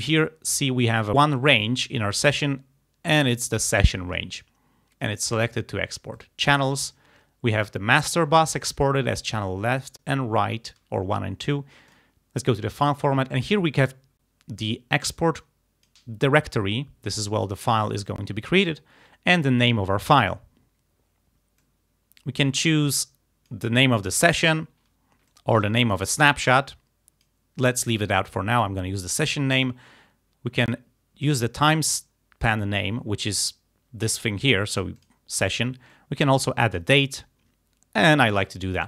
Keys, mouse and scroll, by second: 6.2 click, 11.9 click, 15.1 click, 15.4 click, 17.1 click, 21.6-23.7 drag, 25.3-26.3 drag, 26.6 click, 31.2 click, 33.4 click, 35.0 click, 35.9-37.0 drag.